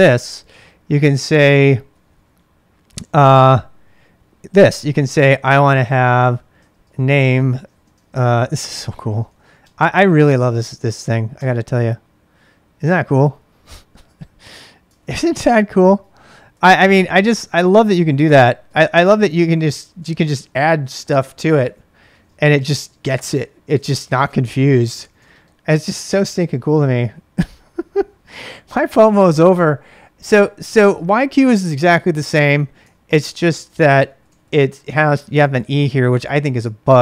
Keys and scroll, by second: 0.0-4.9 typing, 6.3-11.8 typing, 14.9 ctrl+[, 14.9-15.4 typing, 16.4-20.8 typing, 22.1-25.7 typing, 22.7 ctrl+[, 26.1 Return, 32.8 ctrl+[, 33.0-35.9 typing, 36.5 ctrl+[.